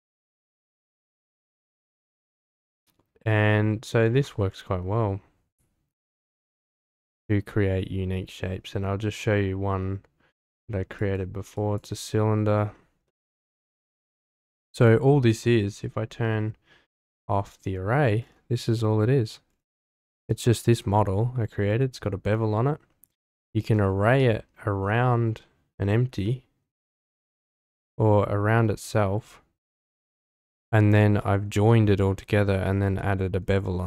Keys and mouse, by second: 6.2 click, 6.9 click, 11.5 click, 13.0-13.4 middle drag, 14.3 click, 17.5 click, 18.7-19.2 middle drag, 19.9 Tab, 20.4 shift+middle click, 24.1 Tab, 26.2-26.6 drag, 30.1-30.7 drag, 31.2 click, 32.3-32.7 shift+middle drag, 33.0 middle click.